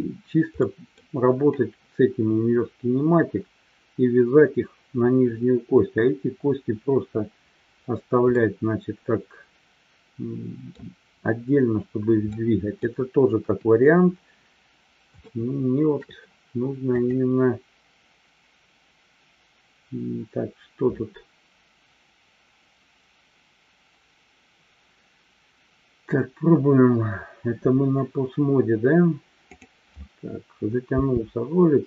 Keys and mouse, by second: 0.6-1.0 middle drag, 8.4-10.8 middle drag, 12.4-12.9 middle drag, 13.4 KP_3, 15.3-16.0 shift+middle drag, 17.1-27.3 drag, 29.5 click.